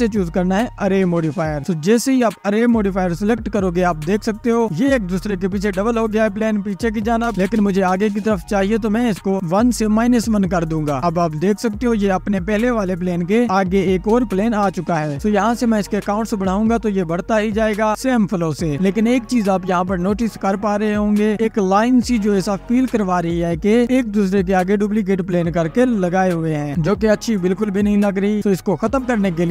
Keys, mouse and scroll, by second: 1.2-1.8 scroll down 1, 2.7-5.2 drag, 5.2 space, 6.4 click, 8.8-12.0 drag, 12.0 scroll down 2, 12.9 click, 14.1 space, 16.3-17.9 drag, 19.1-20.0 middle drag, 20.0 space, 20.5-22.1 scroll up 3, 22.1 click, 23.5 ctrl+s, 24.0 scroll up 2, 25.1 scroll up 1, 25.8-27.4 drag, 27.4 ctrl+s, 28.9-29.4 scroll down 1, 29.4 space.